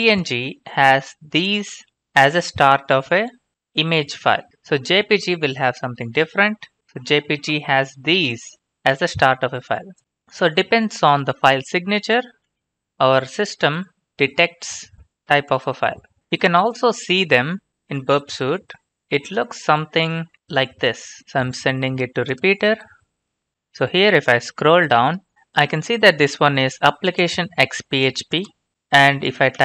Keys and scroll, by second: 4.6 ctrl+f, 5.2-6.4 typing, 12.7 alt+Tab.